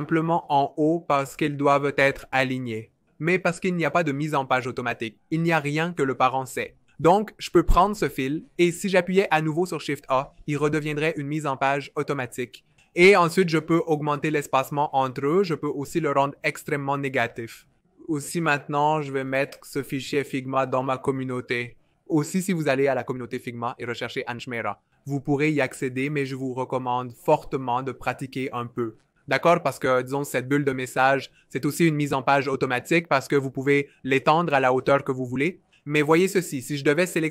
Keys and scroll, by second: 3.0 super+z, 3.3 super+z, 3.8 super+z, 10.4 shift+a, 13.9 shift+Up, 14.1 shift+Up, 14.3 shift+Up, 15.1 shift+Down, 15.3 shift+Down, 15.5 shift+Down, 17.2 super+z, 17.8 super+z, 18.7 super+z, 20.6 BackSpace, 30.2-33.2 typing, 33.7 super+z, 34.1 super+z, 34.4 super+z.